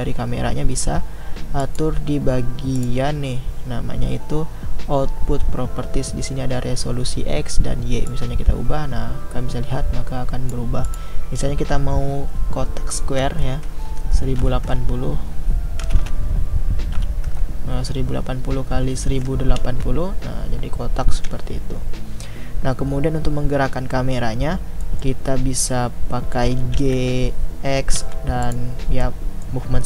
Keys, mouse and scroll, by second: 8.1-19.6 drag, 24.8 middle click, 25.2 scroll down 4, 26.8 g, 29.1-29.8 middle drag.